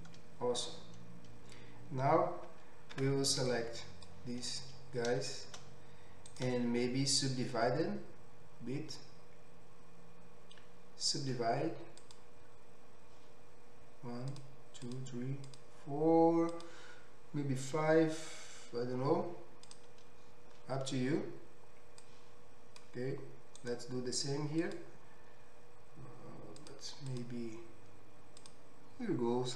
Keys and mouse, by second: 3.0 2.